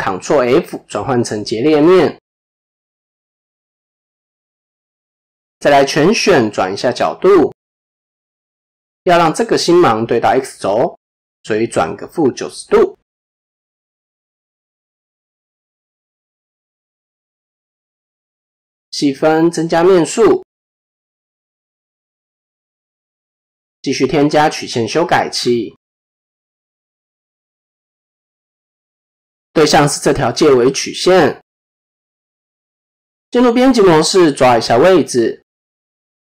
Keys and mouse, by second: 5.8 a, 6.4 r, 10.8-12.8 drag, 13.7 click, 14.4 Tab, 15.8 ctrl+a, 18.9 ctrl+4, 20.2 click, 21.2 click, 22.6-23.1 middle drag, 23.9-26.8 drag, 28.6 click, 30.1-30.5 middle drag, 30.9 KP_7, 32.4 Tab, 35.3 click, 35.8 a.